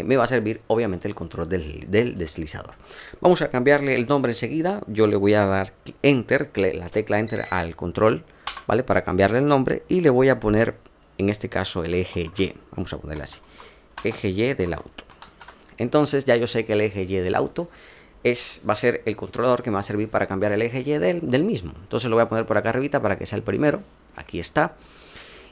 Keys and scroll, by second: 8.4 Return, 11.4-15.2 typing.